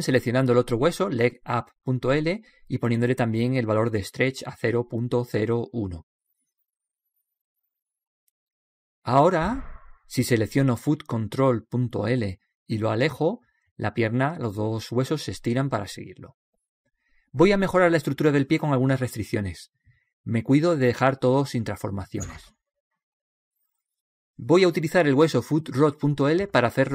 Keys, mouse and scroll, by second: 0.1-1.9 right drag, 1.2 click, 10.7-13.3 right drag, 14.8-16.6 drag, 21.7 alt+g, 23.1-26.9 middle drag.